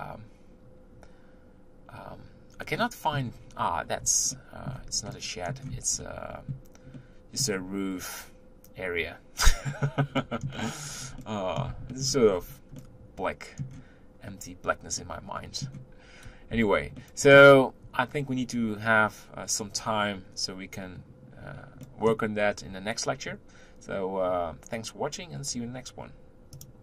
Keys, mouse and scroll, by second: 2.8-5.6 middle drag, 5.6-6.0 scroll up 1, 6.0-10.0 shift+middle drag, 10.1 middle click, 10.8-11.2 scroll down 3, 11.2-12.3 middle drag, 12.3-12.7 scroll up 3, 12.7-16.5 middle drag, 16.5 Tab, 17.1-20.1 middle drag, 21.8-24.8 middle drag.